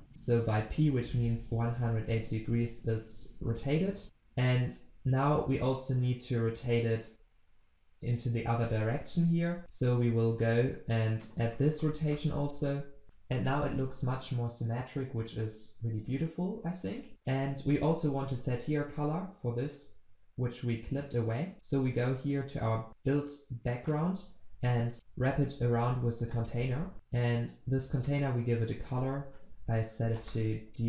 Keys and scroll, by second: 24.7 alt+Return, 28.8 ctrl+c, 28.9 ctrl+v, 30.0 ctrl+s.